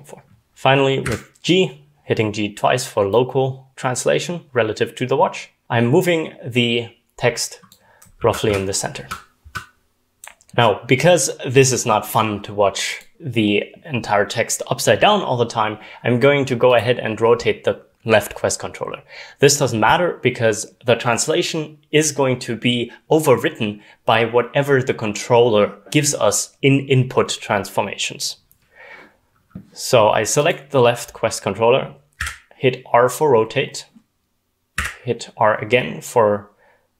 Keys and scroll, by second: 0.5 g, 1.0 g, 8.1 w, 8.4 w.